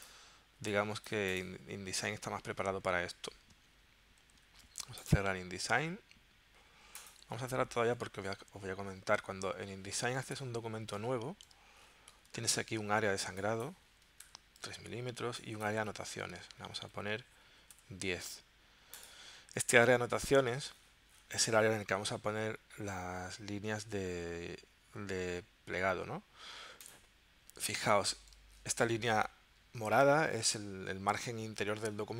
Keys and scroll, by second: 4.3 super+w, 10.3 super+n, 14.2 3, 14.7 Tab, 17.3-18.3 typing.